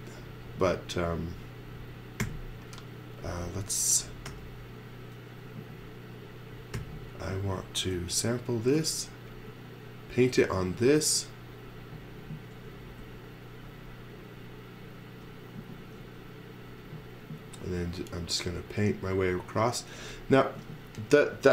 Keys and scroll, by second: 2.2 m, 4.3 i, 6.7 n, 12.9 shift+1, 15.8 shift+1.